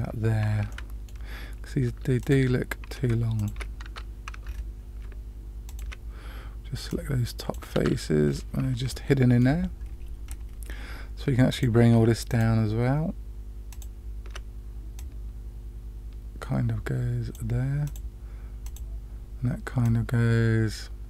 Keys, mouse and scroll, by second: 0.6-1.0 middle drag, 2.2 click, 3.3 shift+click, 3.8 Tab, 4.4-5.0 scroll up 2, 5.6 shift+click, 6.8-7.5 drag, 7.7 Tab, 8.2-8.6 scroll down 2, 8.9-9.4 middle drag, 10.2 scroll down 1, 11.5 click, 12.2 shift+click, 13.7 shift+click, 14.9-17.3 drag, 17.8 click, 18.6 click, 19.8-21.0 drag.